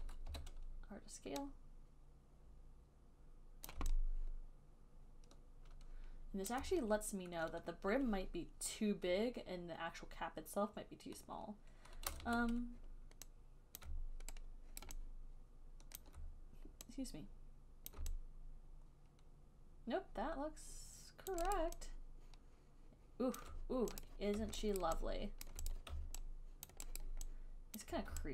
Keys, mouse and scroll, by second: 0.2 click, 0.6 r, 3.9 click, 6.7 alt+click, 12.5 w, 14.1 click, 15.1 alt+right click, 16.3 alt+right click, 18.2 click, 20.3 click, 21.6 click, 21.8 alt+click, 22.0 alt+right click, 23.6 alt+click, 24.3 click, 25.1 alt+right click, 25.7 alt+click, 26.0 click, 26.9 alt+click, 27.3 alt+click, 28.1 alt+right click.